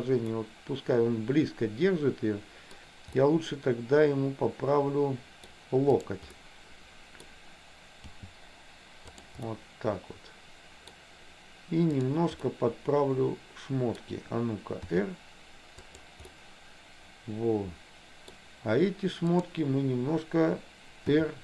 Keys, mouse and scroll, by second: 0.4-2.9 middle drag, 3.3-5.6 middle drag, 3.3 scroll up 1, 5.6 scroll down 1, 6.1 click, 6.3 middle click, 8.2 g, 9.6-10.9 middle drag, 12.2 click, 12.6-14.0 middle drag, 15.0 r, 16.3-18.5 middle drag, 19.4 click, 21.2 r.